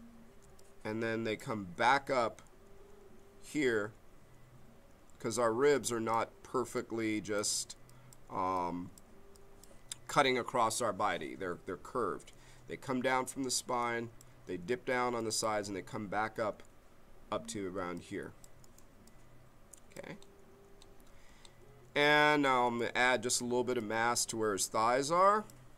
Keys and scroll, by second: 0.4 b, 22.6 b.